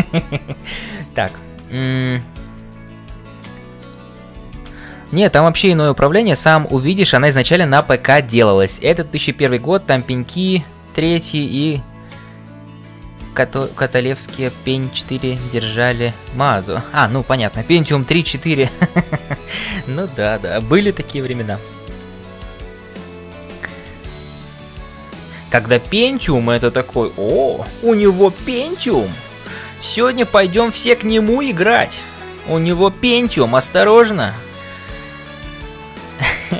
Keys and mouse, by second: 19.7 shift+middle click, 20.4 middle click, 21.3 ctrl+s, 22.3 middle click, 23.8-36.5 typing, 23.9 right click, 25.0-27.4 middle drag, 29.6-30.8 middle drag, 31.6 middle click, 32.9 ctrl+s, 34.3-36.5 middle drag.